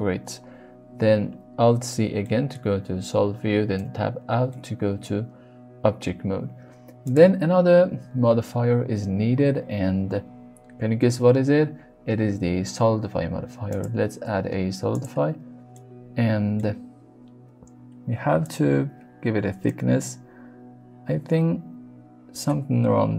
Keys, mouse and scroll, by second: 1.0 alt+z, 2.2 middle click, 3.8 Tab, 4.5 middle click, 7.1 click, 15.7-16.5 middle drag, 18.3-21.7 shift+drag, 22.4 middle click.